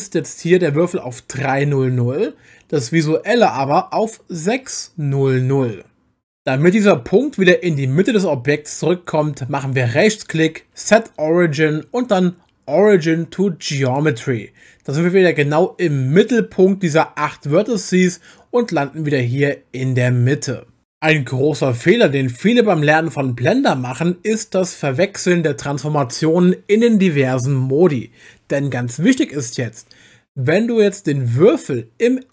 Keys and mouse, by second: 9.9-14.0 right drag.